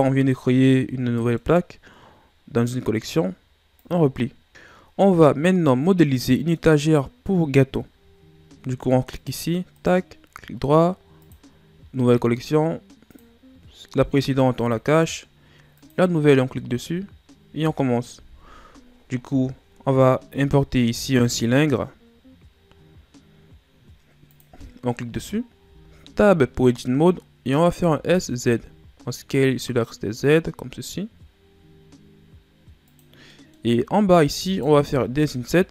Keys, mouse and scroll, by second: 1.1-3.7 middle drag, 3.7 click, 5.8-8.9 middle drag, 9.1 click, 9.7-12.8 right drag, 13.1 click, 14.6 click, 15.8 click, 18.1 KP_1, 20.7 shift+a, 25.6 Tab, 27.7 s, 33.3 middle click, 33.7-34.5 scroll up 1, 34.5 alt+right click, 34.8-35.7 middle drag.